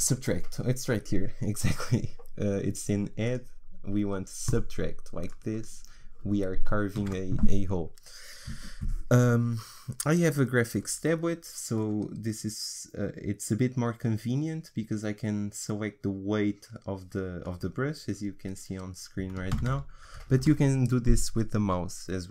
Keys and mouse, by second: 3.2-7.6 drag, 7.0 ctrl+z, 12.1-19.6 drag, 19.6 ctrl+z, 19.7 ctrl+z, 20.4 ctrl+z.